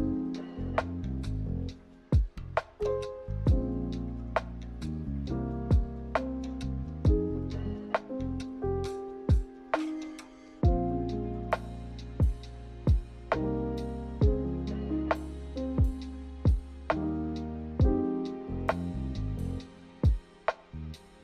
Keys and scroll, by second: 3.1 z, 6.9-7.9 typing, 13.4 k, 19.8 z.